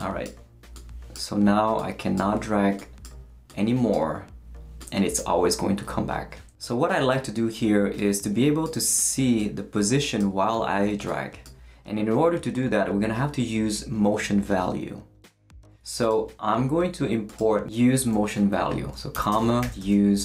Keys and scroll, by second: 18.9-20.2 typing.